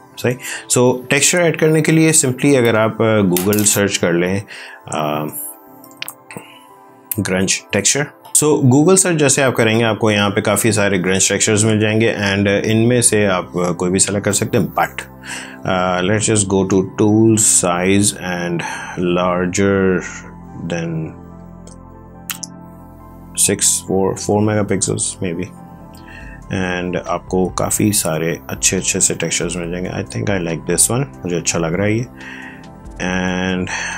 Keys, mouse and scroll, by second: 5.5-6.7 typing, 7.3 Return, 10.8-11.2 scroll down 1.